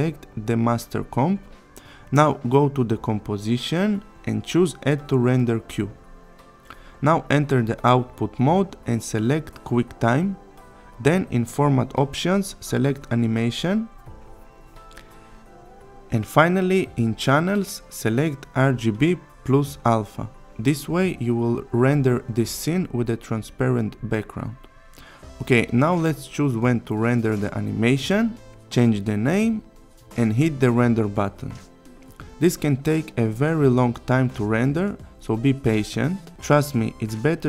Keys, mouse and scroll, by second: 6.9 click, 8.5 click, 12.2 click, 15.4 click, 19.1 click, 23.2 click, 25.0 click, 27.8-29.8 typing, 30.7 click, 31.5 click.